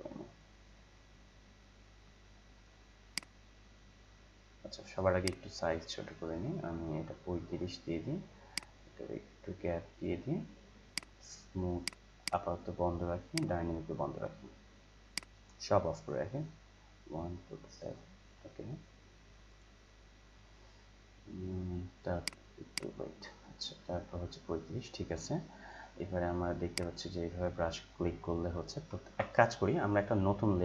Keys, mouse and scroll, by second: 5.2-19.5 drag, 22.2 click, 26.7-28.9 drag, 28.9 ctrl+z, 30.5 click.